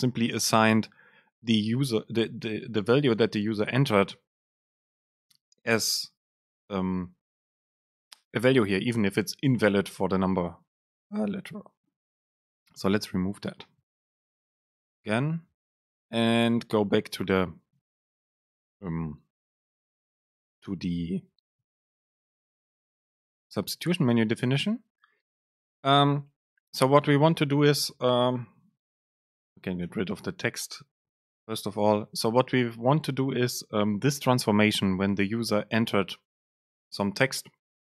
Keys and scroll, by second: 14.9 BackSpace, 19.5 ctrl+shift+super+Left, 24.0 BackSpace, 25.9 super+space, 29.4 BackSpace, 30.0 Escape, 31.9 super+space.